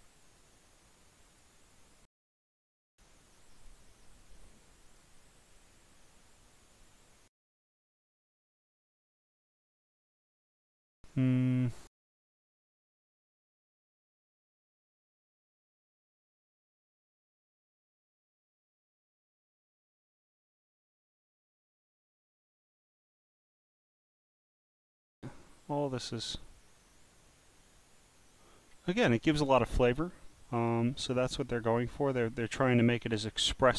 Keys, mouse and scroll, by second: 0.2 click, 1.3 click, 2.6 click, 3.4 click, 4.9 click, 5.5-6.8 drag, 7.9 click, 9.1 click, 12.0 click, 13.4 click, 21.1 scroll down 1, 23.2 click, 29.2-29.7 scroll down 3, 30.5 click, 31.4 click, 32.4 scroll down 1.